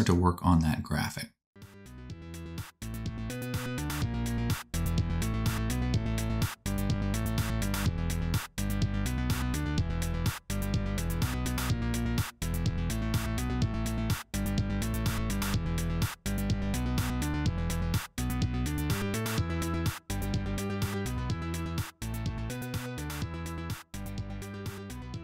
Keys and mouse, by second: 1.5 g, 2.0 shift+c, 2.2 shift+a, 3.0 Tab, 3.0 s, 3.6-5.8 drag, 4.9 2, 5.2 e, 5.8-7.3 middle drag, 7.1 Tab, 7.3 click, 7.3 Tab, 7.4 a, 7.5 s, 7.9 middle click, 8.1 Tab, 8.1 click, 8.9 n, 9.0 n, 9.1 middle click, 9.1 n, 9.1 t, 10.7-11.7 drag, 12.2 shift+click, 12.5 shift+a, 13.1 g, 13.5 click, 13.5 middle click, 13.5 right click, 14.0-15.7 drag, 14.0-15.7 middle drag, 14.0-15.7 right drag, 15.3-18.1 typing, 16.1-18.6 drag, 18.6 middle click, 18.7 click, 20.2-22.1 typing, 20.8 click, 22.2 click.